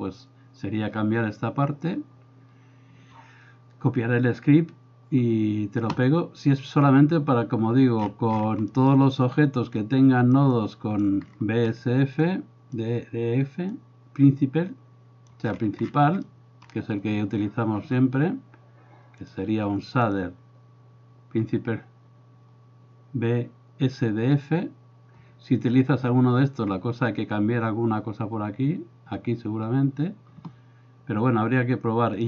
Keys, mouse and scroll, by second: 8.7 middle click, 9.9 click, 10.8 click, 12.3 click, 13.9-15.3 drag, 16.2 middle click, 19.2-27.1 drag.